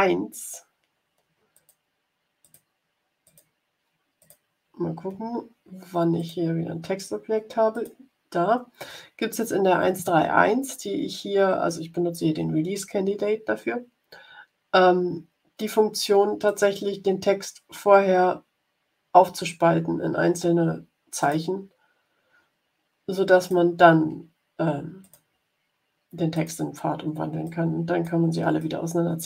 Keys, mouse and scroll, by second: 1.5 click, 2.3 click, 3.2 click, 4.1 click, 6.1 click, 7.6 click, 16.4 click, 21.1 click, 23.3 click, 24.9 click, 26.2 click, 27.4 click, 28.5 click.